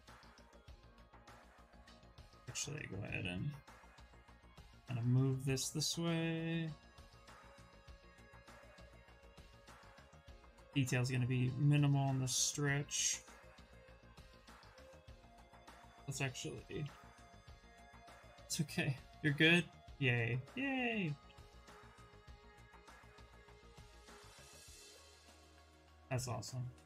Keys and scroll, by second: 9.3 q, 10.2 w, 11.4 q, 15.5 ctrl+z, 16.3 b, 16.6 v, 18.5 s, 20.5 s, 23.6 ctrl+space, 25.4 s, 26.6 s.